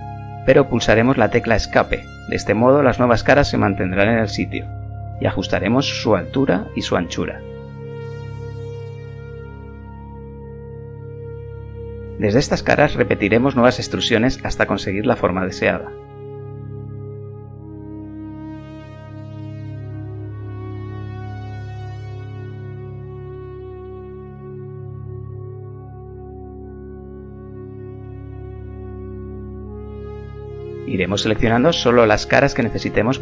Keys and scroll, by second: 7.4 KP_1, 13.9 e, 27.2 KP_1, 32.7 s.